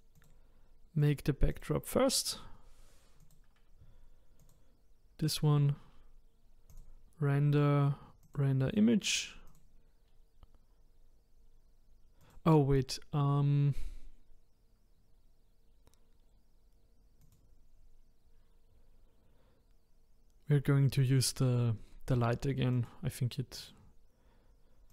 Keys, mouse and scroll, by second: 0.2 click, 1.0 click, 1.5 click, 3.2 click, 4.4 click, 5.2 click, 6.7-9.5 drag, 17.2 click, 22.7-24.9 drag.